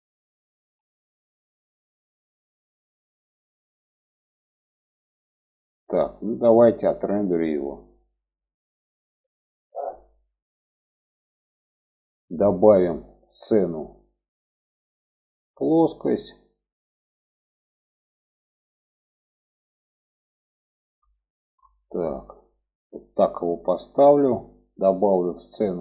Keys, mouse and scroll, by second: 6.7 middle click, 7.6-8.1 middle drag, 8.5-11.5 middle drag, 13.1-16.0 drag, 17.7-21.0 middle drag, 21.8 shift+middle click, 22.6 middle click, 23.6 shift+middle click.